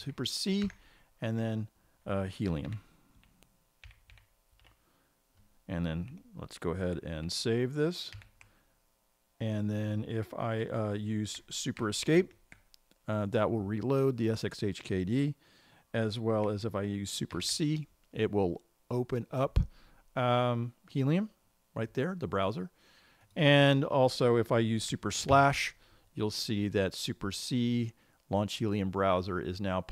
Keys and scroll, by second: 6.3 typing, 8.6 ctrl+s, 12.7 super+Escape, 17.8 super+c.